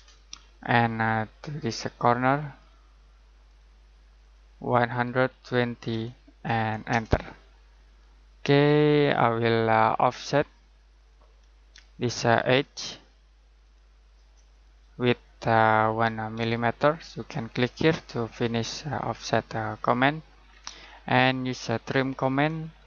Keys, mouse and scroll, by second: 2.5 click, 4.6-5.9 typing, 6.9 Return, 15.0 click, 16.3 typing, 17.7 click, 20.4-22.7 scroll down 1, 22.7 click.